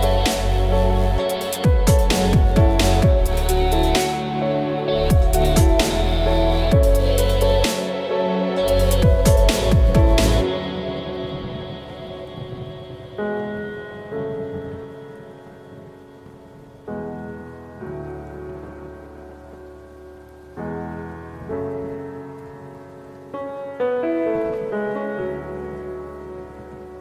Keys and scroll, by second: 7.0 ctrl+KP_0, 7.2 ctrl+KP_Subtract, 11.8 b, 15.5 F6, 18.2 KP_2, 18.6 Return.